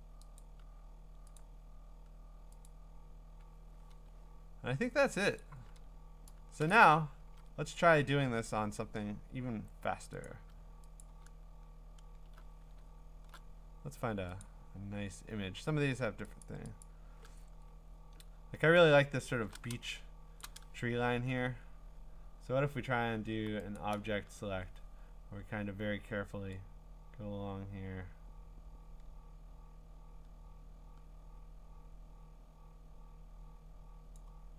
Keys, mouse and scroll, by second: 0.4 click, 1.4 click, 2.7 click, 3.2 scroll, 5.4 click, 6.7 click, 7.2 ctrl+Tab, 9.3-10.0 scroll, 10.0 scroll, 10.2 click, 11.0 click, 11.4-12.5 scroll, 12.8-13.3 scroll, 14.4 click, 14.7-15.2 scroll, 16.4 click, 16.8 click, 17.5-19.7 scroll, 20.2 scroll, 20.4 click, 23.8 click, 34.1-34.5 drag.